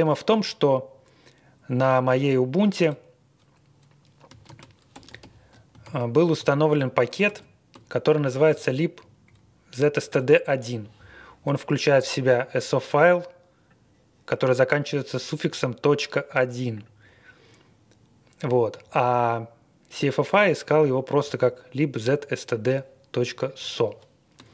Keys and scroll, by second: 2.8 Return, 4.5 ctrl+r, 4.9 typing, 5.8 ctrl+r, 6.4 ctrl+r, 7.3 ctrl+r, 8.5 Right, 9.0 Right, 9.2 Right, 10.1 Return.